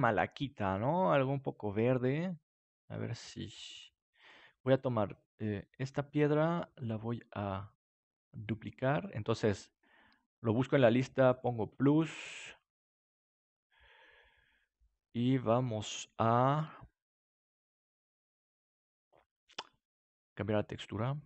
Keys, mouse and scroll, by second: 4.1-10.2 drag, 11.3-15.7 drag, 20.9 click.